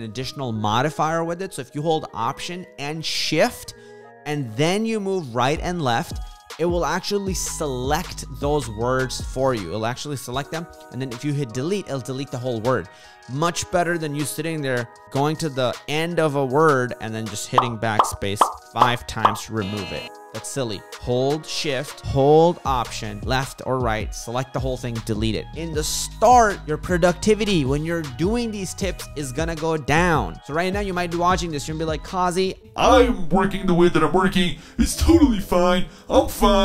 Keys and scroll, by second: 19.3 Delete.